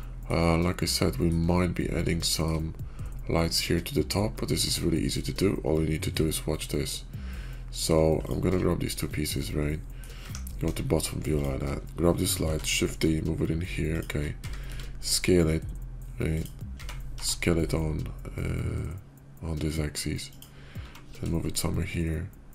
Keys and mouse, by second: 0.5-1.2 middle drag, 1.4-2.4 shift+middle drag, 5.0-7.8 middle drag, 8.0 shift+middle click, 8.7 /, 9.3-9.9 middle drag, 10.5 KP_5, 12.4 shift+d, 14.3 s, 16.6 s, 20.7 g.